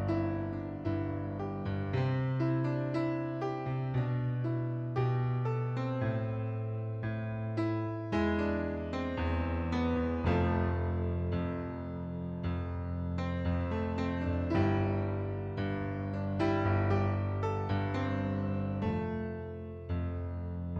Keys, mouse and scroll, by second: 1.3 click, 2.9 click, 4.3 KP_3, 4.6 Return, 6.0 click, 6.9 KP_7, 7.0 KP_0, 7.3 Return, 8.5 click, 9.0 KP_7, 9.2 KP_0, 9.4 Return, 10.3 middle click, 11.2 ctrl+d, 12.1 click, 14.2 click, 15.2 click, 17.3 KP_6, 17.7 Return, 18.5 click, 19.0 KP_6, 19.3 Return, 20.3 click.